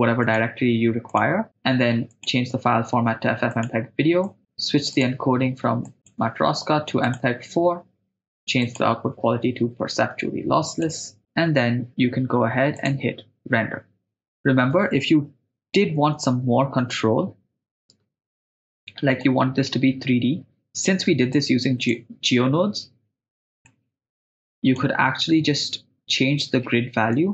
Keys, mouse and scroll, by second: 1.5 click, 2.1-4.4 drag, 4.9 click, 6.0-7.3 drag, 8.6-11.0 drag, 12.7-15.5 drag, 15.5 n, 16.3 n, 17.9 KP_0, 18.8 right click, 19.2-21.0 middle drag, 21.3 click, 23.7-24.9 drag, 25.2-26.6 middle drag, 27.1 ctrl+middle click.